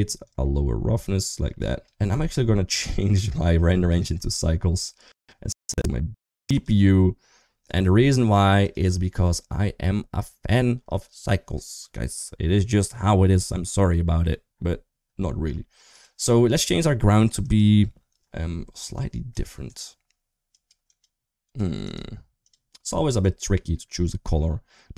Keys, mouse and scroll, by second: 0.0-1.6 drag, 2.5 click, 4.1 click, 5.4-6.9 drag, 8.3 click, 15.7 click, 17.2 click.